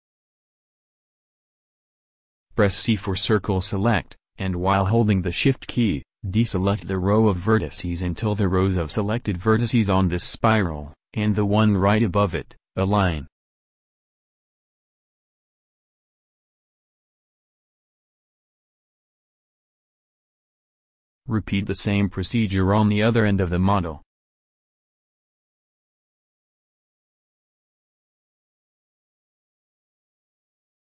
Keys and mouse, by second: 3.0 c, 6.9 middle click, 8.3 c, 12.5 c, 17.5-19.2 middle drag, 20.6-22.4 right drag, 26.6 c.